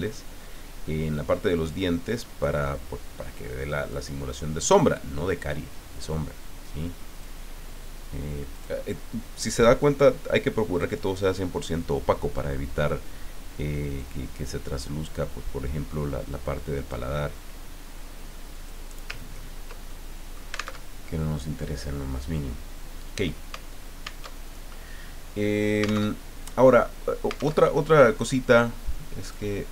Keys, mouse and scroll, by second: 3.9 click, 5.3 click, 6.6 click, 8.5 click, 9.8 click, 14.0-17.1 drag, 18.5 click, 19.2-19.8 ctrl+scroll down 1, 19.8 ctrl+scroll down 1, 19.9 ctrl+middle click, 20.1 ctrl+click, 20.2 middle click, 20.3 click, 20.8 alt+Tab, 24.2 alt+Tab, 26.1 alt+Tab, 27.6 alt+Tab, 29.2 click.